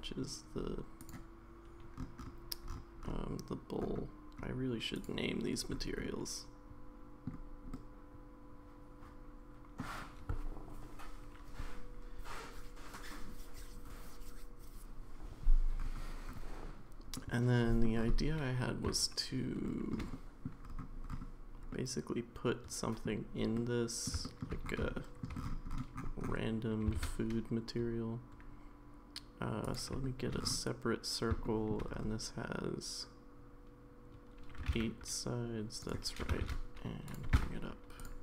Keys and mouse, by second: 1.1-5.0 drag, 6.1-7.3 middle drag, 7.7-9.8 middle drag, 17.1-17.8 middle drag, 19.6-19.9 shift+middle drag, 20.1-20.5 middle drag, 21.7-23.0 middle drag, 23.6-24.1 middle drag, 24.2 shift+middle drag, 25.0 shift+middle drag, 27.0 shift+a, 30.0 shift+middle drag, 31.4 shift+middle click, 34.6 g, 36.2 g.